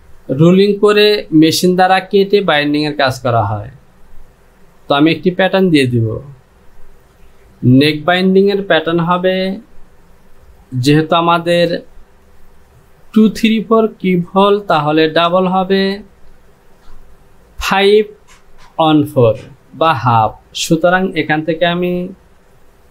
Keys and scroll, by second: 8.0 Down.